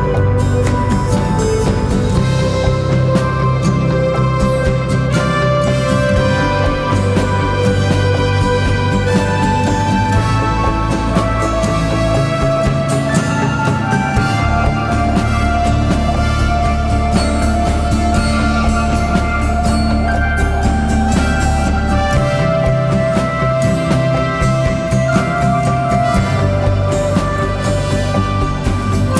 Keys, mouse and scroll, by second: 3.0-5.0 typing, 5.1 double click.